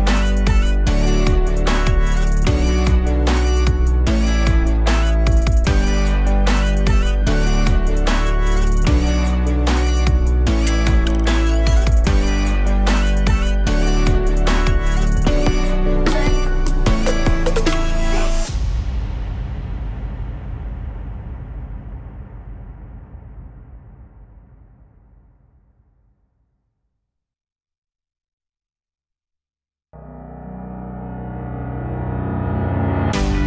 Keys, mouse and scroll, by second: 4.1 click, 4.5-5.3 alt+drag, 5.6 scroll down 3, 5.9 alt+click, 6.5 scroll up 1, 8.6 click, 9.1 alt+click, 10.3 Tab, 11.1-12.7 alt+drag, 12.7 2, 13.1 click, 13.4 alt+shift+click, 13.6 alt+shift+click, 15.1-17.2 drag, 17.2 l, 18.9-21.5 drag, 22.9 Tab, 25.6-26.8 alt+drag, 26.8 Tab, 27.9-29.0 drag, 29.0 Tab, 29.3-30.6 alt+drag, 30.8-31.2 alt+drag, 31.2 scroll down 2, 31.5-31.9 alt+middle drag, 31.9-32.5 alt+drag, 32.6 shift+a.